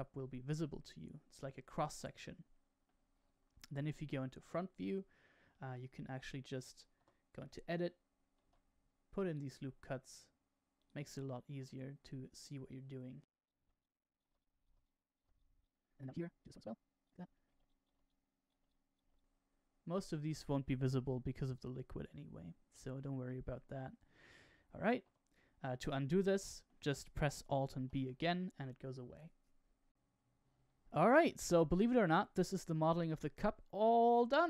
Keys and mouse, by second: 3.7 KP_1, 6.9 Tab, 8.4 ctrl+r, 11.4 ctrl+r, 13.6 ctrl+r, 14.3 ctrl+r, 14.7 ctrl+r, 15.2 ctrl+r, 15.7 middle click, 15.9 shift+middle click, 16.1 ctrl+r, 17.3 shift+middle click, 17.5 ctrl+r, 17.9 ctrl+r, 18.6 ctrl+r, 19.0 ctrl+r, 20.8-22.0 middle drag, 23.2 shift+middle click, 25.0 Tab, 25.6-26.6 middle drag, 27.7 alt+b, 31.2-34.3 middle drag.